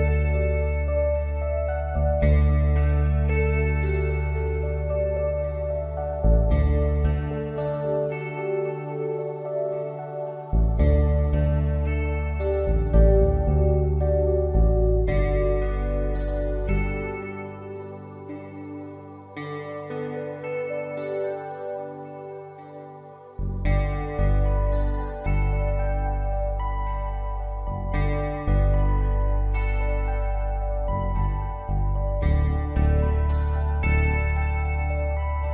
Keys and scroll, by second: 3.9 ctrl+b, 35.4 p.